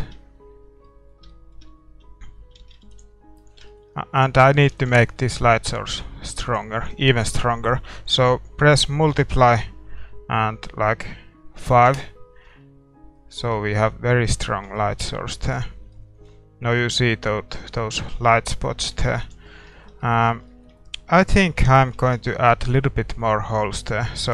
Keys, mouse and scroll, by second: 0.0 shift+z, 0.2 middle click, 2.6 shift+z, 3.1 ctrl+s, 4.1-13.1 right drag, 5.1 ctrl+s, 13.8 shift+z, 15.6 ctrl+s, 19.0 shift+z, 19.4 ctrl+s, 19.4-23.9 middle drag, 20.8-22.7 right drag, 21.5 Tab, 22.2 a.